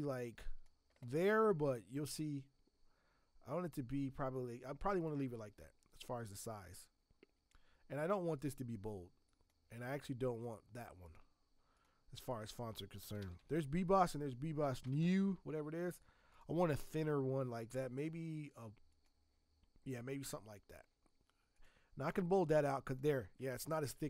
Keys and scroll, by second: 12.9-15.0 typing, 23.8 ctrl+t.